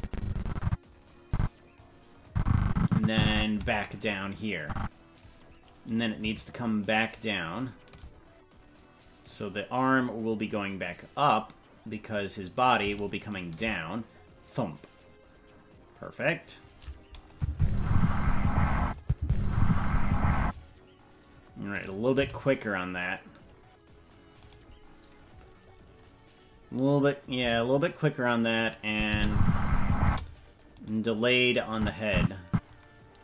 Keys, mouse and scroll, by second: 2.3-3.5 drag, 4.6 click, 6.0-10.2 right drag, 10.5-12.2 drag, 12.7-13.9 right drag, 13.9-16.6 drag, 17.3-18.6 drag, 17.5 space, 18.8 space, 19.0 click, 19.2 space, 20.4 space, 21.7 right click, 22.2 g, 27.4 g, 28.9 click, 29.1 space, 30.0 space, 30.9 right click, 31.7 click.